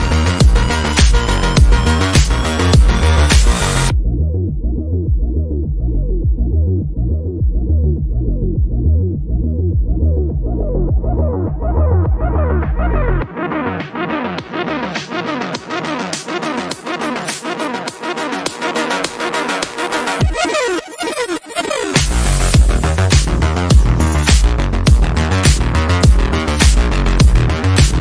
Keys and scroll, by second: 2.8 shift+F2, 3.6 F3, 12.3 space.